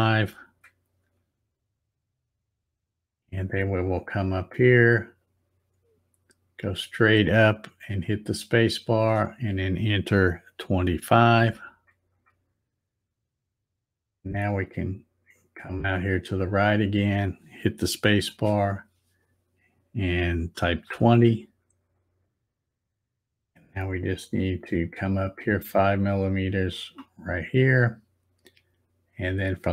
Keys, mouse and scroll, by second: 5.1-9.1 drag, 8.9 space, 15.3-18.5 drag, 18.2 space, 24.8-26.9 drag.